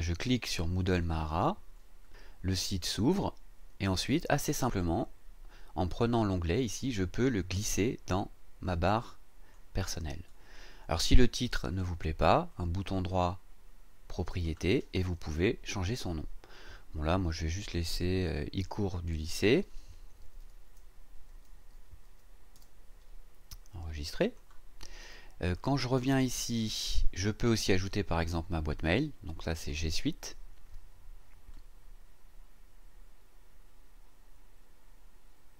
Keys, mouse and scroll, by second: 0.9 click, 6.4-9.7 drag, 12.5 right click, 14.3 click, 19.3 click, 20.2 BackSpace, 24.2 click, 25.6 click, 29.6 click.